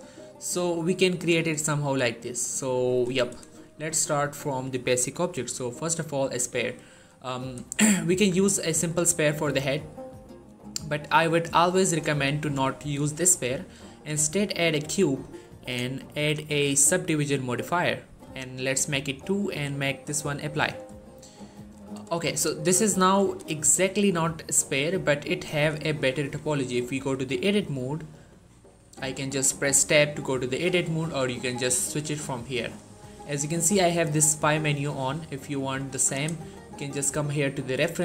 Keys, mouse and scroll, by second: 1.5-3.0 shift+middle drag, 6.6 shift+middle click, 8.0 shift+a, 14.5 click, 20.8 shift+middle click, 22.1 shift+middle click, 22.2 scroll up 1, 23.0-24.5 scroll down 1, 24.5-24.9 scroll up 1, 25.1-26.0 middle click, 26.6 Tab, 27.4-28.3 middle click, 28.6 Tab, 31.2 click, 32.9 Tab, 35.6 click.